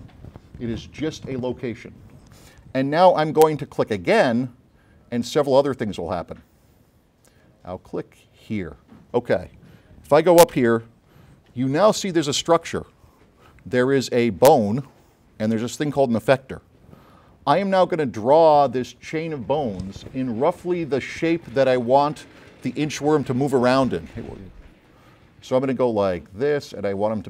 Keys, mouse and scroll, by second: 8.5 click, 10.7 a, 25.8 click, 26.3 click, 26.7 click, 27.0 click.